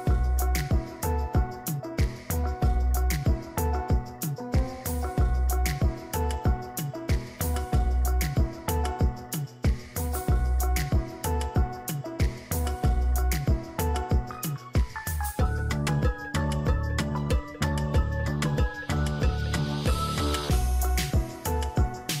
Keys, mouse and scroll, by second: 2.2 right click, 4.7 right click, 4.9 ctrl+click, 10.6 ctrl+z, 13.0 ctrl+z, 14.2 [, 14.7 [, 17.2 ctrl+z, 18.3-19.4 [, 20.0 [, 20.2 [.